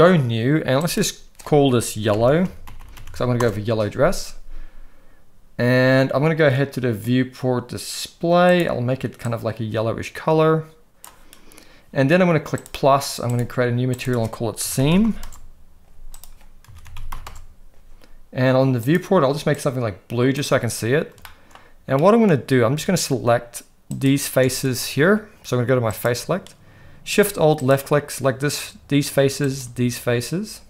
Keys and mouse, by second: 0.9-3.4 drag, 2.8 l, 8.5 click, 12.6 click, 13.3 drag, 14.0-15.2 drag, 14.9 e, 16.3-17.4 drag, 18.9 click, 21.2 shift+middle click, 22.0 middle click, 23.9 alt+shift+click, 25.9 click, 29.5 alt+shift+click.